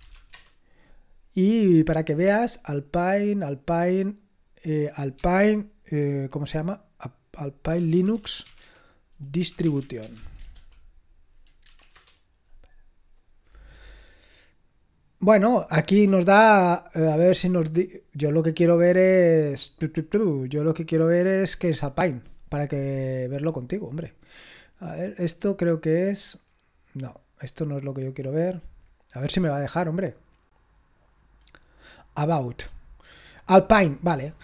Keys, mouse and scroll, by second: 0.0-0.6 typing, 4.0 click, 7.5-11.0 typing, 11.6 Down, 11.9 Return, 13.7-16.6 drag, 16.6-17.8 scroll down 1, 17.8-18.7 scroll up 1, 18.7-21.3 scroll down 1, 21.3 click, 24.0 click, 26.5 scroll down 2, 27.5 click, 30.7 scroll down 2, 31.5-32.6 scroll up 2, 32.6 scroll up 1, 32.8 click.